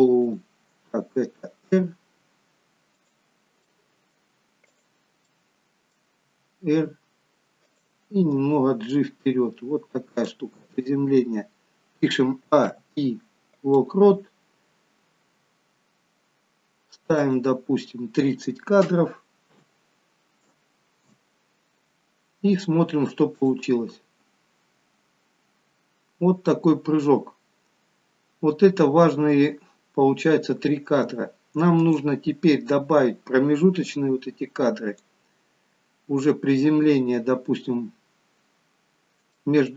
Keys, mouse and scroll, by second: 0.3 click, 1.6 r, 3.8 middle click, 4.8 click, 5.5 middle click, 6.4 r, 8.5 g, 12.6 a, 15.3-16.7 scroll down 1, 17.3 scroll down 1, 17.4 click, 23.5 click, 32.1 click, 33.3 click, 38.2-39.3 scroll up 1, 39.3 scroll up 1, 39.6 shift+middle click.